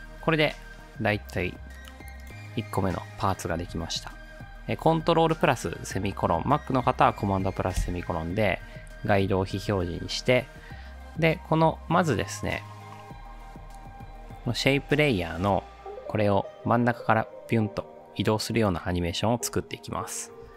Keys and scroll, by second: 7.8 ctrl+;.